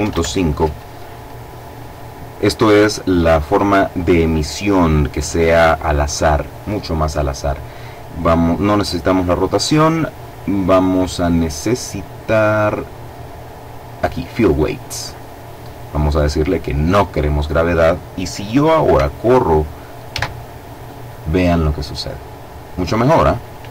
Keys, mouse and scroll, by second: 8.1 click, 12.2-13.4 scroll down 1, 14.0 click, 14.3-15.3 scroll down 1, 15.8-17.1 drag, 19.7 alt+a, 23.5 Escape.